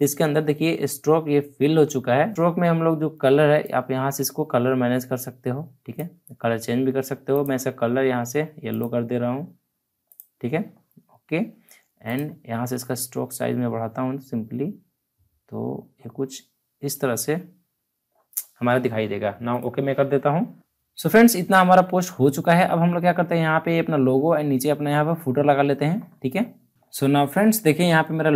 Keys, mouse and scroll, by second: 2.0 alt+scroll up 1, 2.3-3.6 drag, 3.6-13.0 drag, 13.0-14.8 scroll up 1, 15.9-17.2 scroll down 1, 17.2 scroll up 1, 19.5 click, 20.5 alt+scroll down 1, 20.6 alt+scroll up 1, 21.0 alt+scroll down 1, 26.7 alt+Num_Lock, 26.7-27.0 alt+scroll down 1.